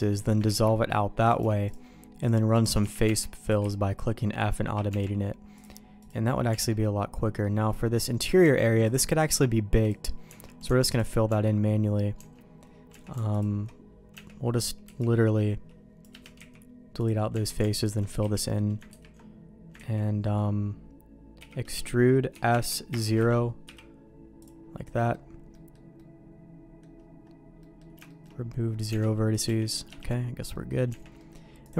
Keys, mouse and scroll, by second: 0.5 ctrl+x, 1.2 click, 1.7 shift+click, 2.8 f, 3.0 Tab, 3.4 click, 3.6-4.9 f, 4.9 Tab, 5.6 click, 6.5 Tab, 6.8 middle click, 8.4 Tab, 8.8 click, 9.3 x, 10.3 Tab, 10.9 alt+click, 11.3 Tab, 12.2 Tab, 12.9 Tab, 13.4 alt+click, 14.1 Tab, 14.8 c, 16.4 x, 17.3 Tab, 17.8 alt+click, 18.2 f, 18.9 ctrl+t, 19.8 ctrl+z, 21.4 e, 22.3 s, 23.2 a, 23.6 m, 25.0 middle click, 25.5 middle click, 26.0 middle click, 27.6 middle click, 28.1 shift+middle click, 28.9 Tab, 29.3 click, 29.5 g, 30.5 middle click, 30.9 Tab, 31.2 middle click, 31.6 click.